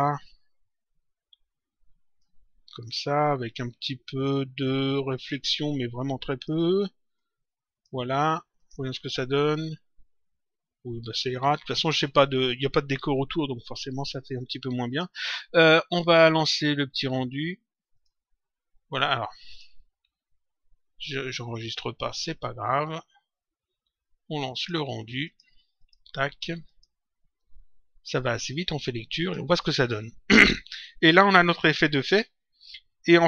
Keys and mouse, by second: 0.2 click, 2.7 click, 5.1 click, 6.2 click, 8.5 click, 14.8 click, 17.9 click, 19.4 click, 21.6 click, 24.5 click, 29.2 click.